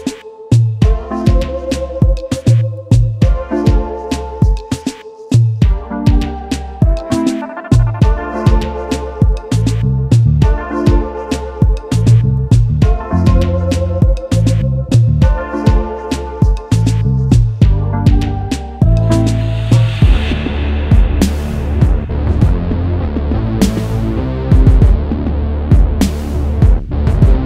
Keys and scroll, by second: 1.0 ctrl+t, 2.1 ctrl+a, 2.7-3.7 typing, 5.0-6.9 typing, 13.9 ctrl+z, 26.7 ctrl+s.